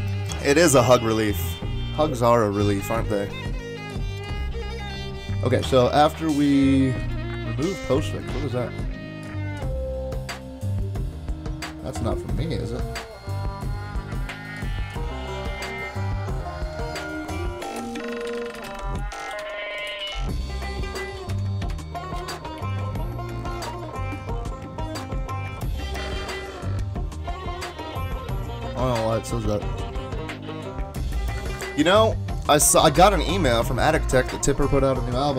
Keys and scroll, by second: 17.4-22.2 typing.